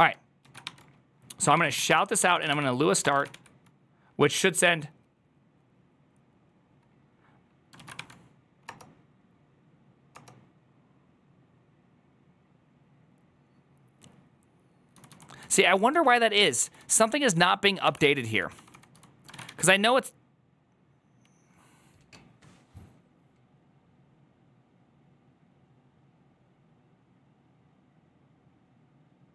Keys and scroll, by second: 0.3 ctrl+a, 0.3-3.2 typing, 2.9 Return, 2.9 Up, 3.0 ctrl+a, 9.7 ctrl+a, 9.7 Return, 9.7 1, 10.0 Return, 17.7-19.4 typing, 19.2 ctrl+a.